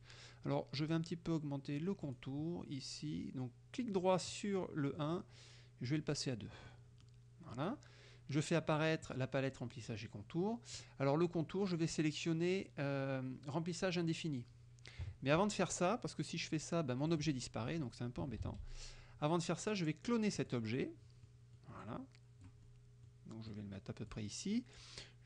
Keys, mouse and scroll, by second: 2.1 right click, 4.4 right click, 5.9 click, 6.6 middle click, 6.7 click, 7.1 click, 9.1 click, 10.8 click, 15.1 KP_Subtract, 15.8 middle click, 17.2 click, 18.5 ctrl+z, 20.4 click, 21.3 middle click, 22.7 middle click, 23.5 click.